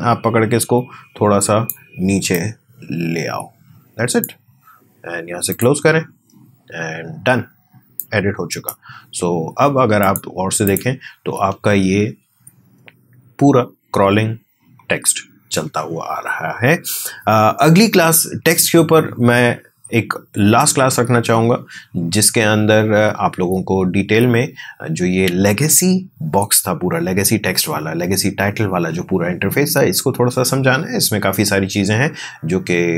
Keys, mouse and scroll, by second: 7.9-10.0 drag, 11.3 space.